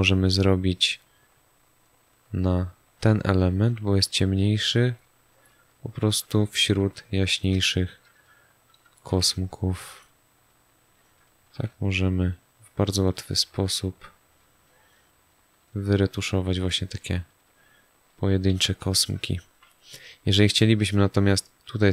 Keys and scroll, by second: 7.5 space, 18.5 z, 19.1 space.